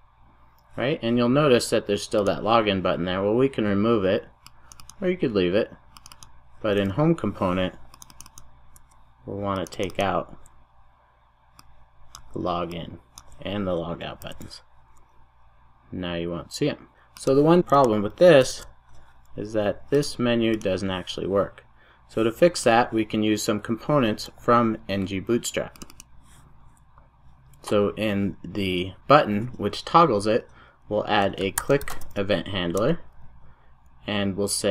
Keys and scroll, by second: 14.2 super+s, 32.9 Return.